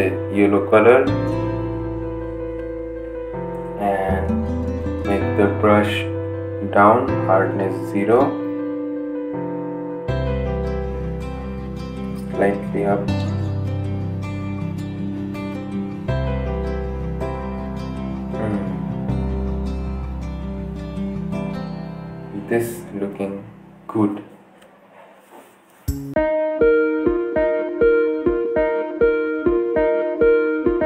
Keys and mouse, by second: 3.5 right click, 4.9-13.6 drag, 14.5 right click, 15.7-18.0 drag, 18.0 typing, 19.7 ctrl+z, 20.0 right click, 21.1-23.2 drag, 26.7 click, 27.8 ctrl+z.